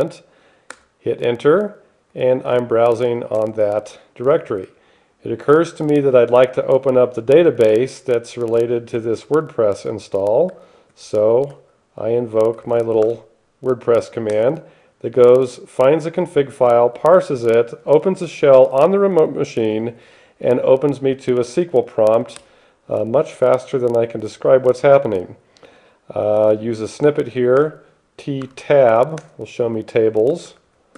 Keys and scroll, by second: 1.0 Return, 2.4 n, 3.0 p, 3.7 Return, 9.2 shift+6, 10.7 alt+x, 11.0-13.1 typing, 13.3 Tab, 14.5 Return, 22.7 F1, 27.9 t, 28.7 Tab, 29.5 Return, 30.4-30.9 typing.